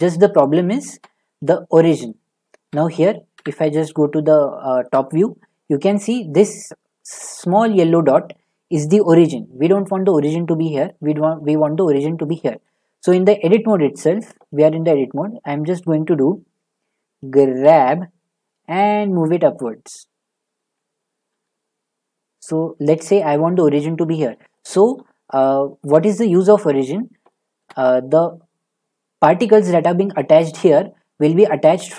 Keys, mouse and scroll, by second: 0.0 shift+middle click, 0.6 scroll down 10, 0.9 shift+middle click, 2.1 middle click, 2.4 shift+middle click, 3.4 7, 5.1-5.7 scroll up 7, 5.7-6.4 scroll, 6.6-7.9 scroll, 9.2-9.8 scroll, 13.0 shift+middle click, 13.2 shift+middle click, 16.0 middle click, 17.6 g, 21.3 y, 23.1 click, 23.8 middle click, 23.9 middle click, 24.3 middle click, 25.0 shift+middle click, 25.1 shift+middle click, 25.8-26.6 scroll, 26.7-27.4 scroll, 27.6-28.4 shift+middle click, 27.9-28.2 scroll, 29.4 middle click, 30.3 middle click.